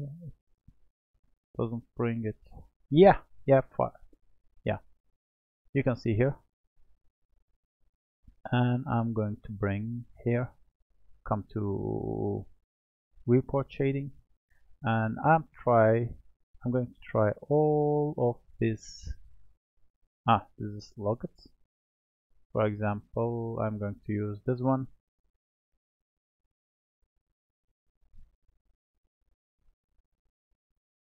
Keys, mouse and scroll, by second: 1.1 click, 1.9 click, 5.0-6.3 scroll up 3, 6.3-9.3 middle drag, 9.3 click, 25.3-26.6 scroll down 2, 26.6-28.8 scroll up 1, 28.8-29.6 scroll up 1.